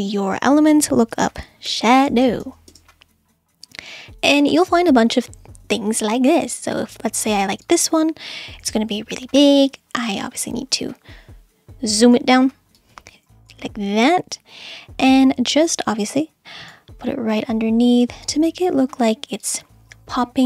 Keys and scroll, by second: 1.1-3.0 typing.